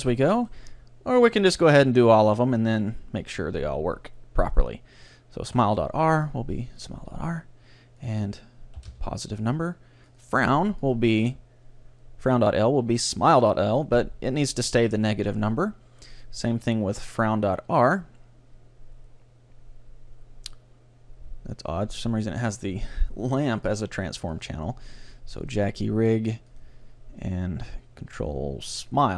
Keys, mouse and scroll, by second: 0.2-2.2 right drag, 3.2-5.1 drag, 5.6-7.4 drag, 8.0-9.9 drag, 10.1-12.8 drag, 16.2-18.0 drag, 23.8-26.2 drag, 26.6-28.4 drag.